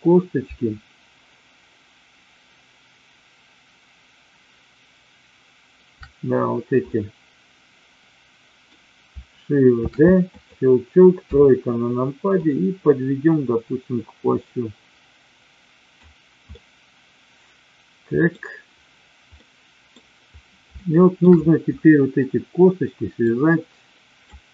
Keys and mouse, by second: 6.9-8.7 middle drag, 9.9 shift+d, 10.3 click, 11.3 KP_3, 12.3-15.9 drag, 16.4-18.3 middle drag, 19.4 middle click, 20.8 shift+middle click, 23.3 click.